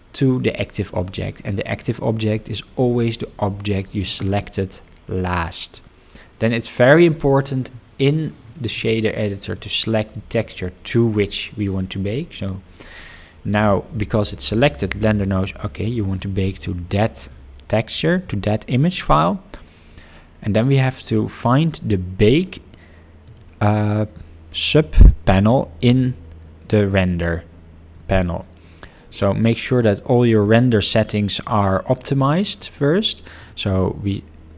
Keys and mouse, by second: 9.5 click, 10.2-14.9 drag, 33.4-34.5 drag.